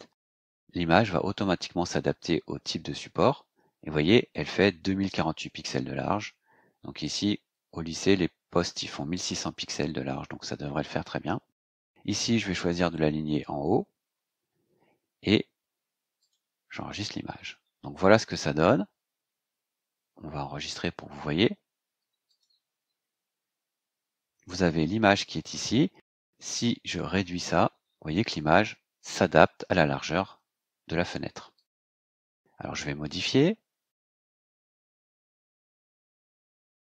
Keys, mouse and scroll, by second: 4.2 click, 14.4-14.7 scroll down 2, 16.1 click, 19.8-20.5 scroll down 2, 22.2 click, 26.9 click, 27.3-28.3 drag, 31.5 click, 33.0 click, 34.2 click, 34.8-36.2 scroll up 2, 36.2-36.8 scroll down 4.